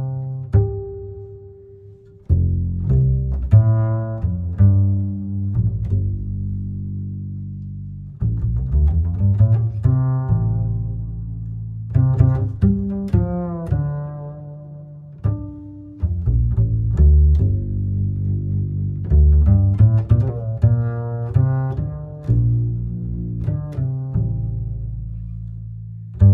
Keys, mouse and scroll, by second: 5.1-6.8 middle drag, 6.8-10.0 shift+drag, 17.1 ctrl+middle click, 17.8-20.9 drag, 21.0-24.1 drag, 26.2 click.